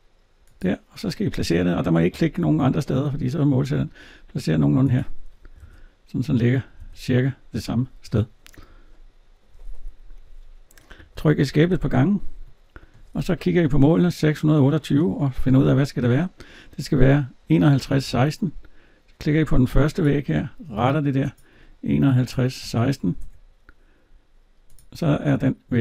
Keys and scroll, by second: 5.4 alt+Tab, 10.8 Escape, 15.3 alt+Tab, 23.0 Return, 25.7 alt+Tab.